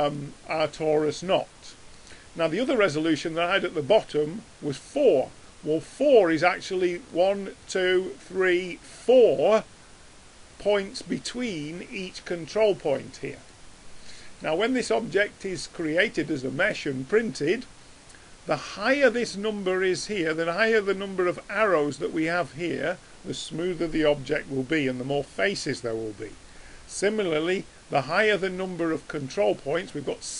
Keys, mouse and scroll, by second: 0.7 middle click, 1.5 middle click, 1.7-7.0 middle drag, 7.0-9.6 drag, 13.6-30.3 middle drag, 28.0-30.3 drag.